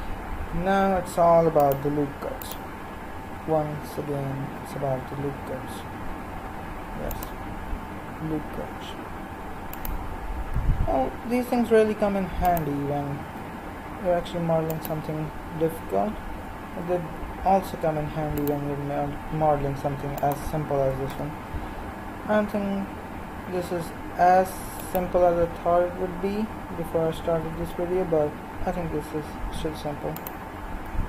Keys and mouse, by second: 0.9 ctrl+r, 3.2 g, 7.7 r, 10.5 s, 13.3 g, 17.6 ctrl+r, 20.8 s, 27.5 g, 30.8 s.